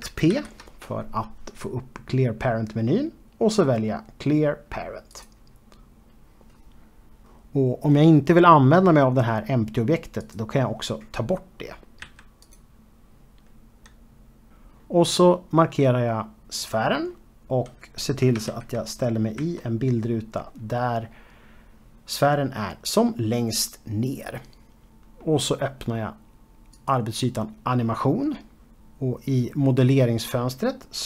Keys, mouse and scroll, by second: 6.1 click, 11.2 click, 13.1 x, 13.5 click, 16.2 click, 18.3 Left, 26.4 click, 30.8 z.